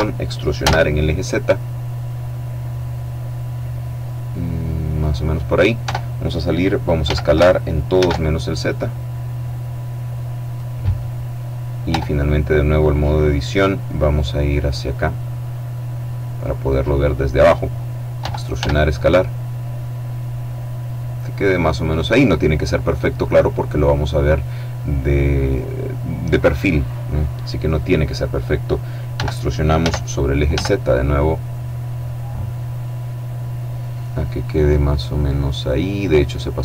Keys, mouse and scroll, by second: 0.2 z, 4.6 click, 5.4 Tab, 6.6 s, 7.5 shift+z, 10.1 click, 10.9-11.5 scroll up 1, 11.4 Tab, 13.4-16.8 middle drag, 17.8 e, 18.1 s, 21.4 click, 21.9 middle click, 23.4 click, 27.2-28.4 drag, 28.7 e, 29.4 z, 30.0 z, 34.0 click, 34.2 right click.